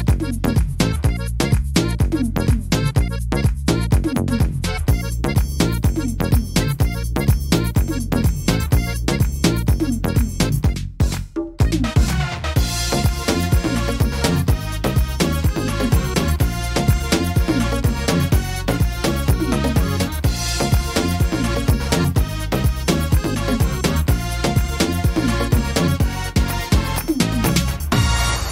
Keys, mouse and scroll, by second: 0.5 middle click, 0.8-1.5 scroll down 5, 1.5 middle click, 1.9-2.4 scroll up 2, 2.4 scroll down 1, 2.8-3.6 scroll up 3, 3.8 shift+middle click, 5.4 click, 7.3 click, 9.4 click, 11.6-12.5 scroll down 1, 12.8 s, 14.2 middle click, 14.6-15.2 scroll down 2, 15.2-15.8 scroll down 2, 16.0 click, 16.0-17.2 scroll down 1, 18.0 s, 19.7 click, 21.3 click, 22.3 middle click, 22.9 scroll up 3, 23.6 middle click, 23.6-24.3 scroll up 1, 24.9 s, 26.9 click, 28.4 middle click.